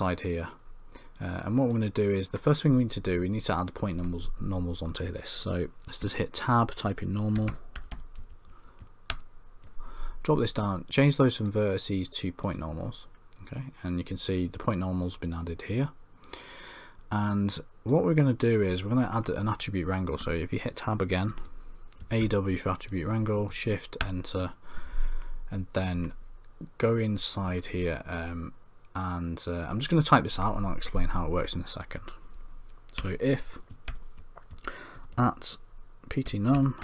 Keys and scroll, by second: 6.0 Tab, 21.3 Tab.